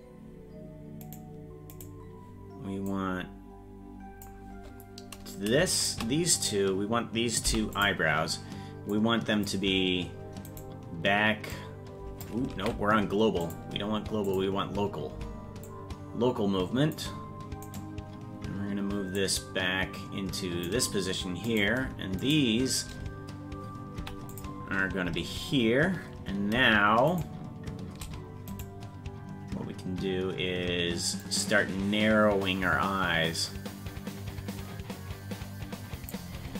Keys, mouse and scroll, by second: 1.9 right click, 2.9-6.0 drag, 6.0 shift+right click, 6.6 shift+right click, 7.4 i, 8.9 click, 10.5 right click, 11.5 click, 12.6 ctrl+z, 13.4 click, 16.5 click, 17.8 right click, 19.1 click, 21.7 right click, 22.3-24.0 shift+right drag, 24.0 i, 28.7 right click, 31.2 click, 33.5-36.2 drag.